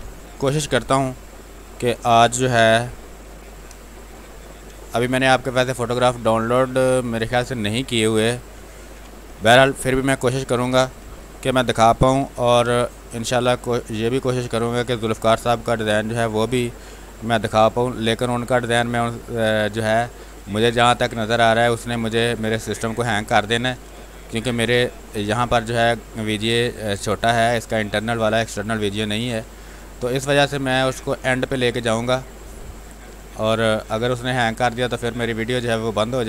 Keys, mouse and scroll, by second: 0.8 ctrl+space, 1.1 ctrl+click, 1.3 ctrl+space, 2.7 r, 2.9 click, 4.1 w, 5.6 space, 5.8 click, 8.9 b, 9.3 space, 9.5 ctrl+click, 10.2 click, 11.1 r, 11.3 click, 12.6 space, 12.8 click, 13.1 space, 14.2 click, 15.2-19.5 drag, 19.5 space, 19.7 click, 20.3 space, 20.5-23.0 drag, 23.0 space, 23.2 click, 23.5 space, 24.2 click, 25.2 ctrl+z, 25.6-27.5 drag, 27.5 click, 29.1 space, 29.3 click, 29.6 space, 30.7-34.9 drag, 35.2 space, 35.8-36.2 drag.